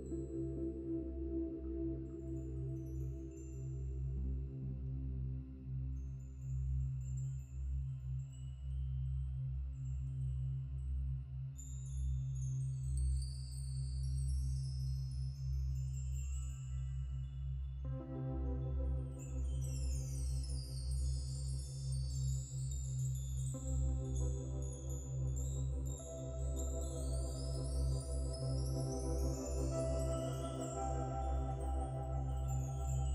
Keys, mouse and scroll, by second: 0.9-1.6 scroll up 2, 2.8 scroll down 1, 3.0 middle click, 4.0 click, 4.5-4.8 scroll down 4, 5.3-5.6 scroll down 6, 5.6 middle click, 6.3-6.6 scroll down 1, 6.6 middle click, 7.2 scroll down 4, 7.4 Tab, 8.1-9.8 drag, 10.2 scroll down 3, 10.5 middle click, 10.8 Tab, 11.5 a, 12.4 a, 13.3 click, 16.4-17.4 scroll down 4, 17.4 click, 18.4 click, 20.0-20.9 scroll up 7, 20.9 click, 22.3 click, 22.5 scroll down 3, 22.7-24.0 middle drag, 23.9 click, 25.9 middle click, 26.7 KP_1, 27.4 Tab, 27.9 click, 29.0 Tab, 29.7 click, 30.6-31.7 middle drag, 31.7 click.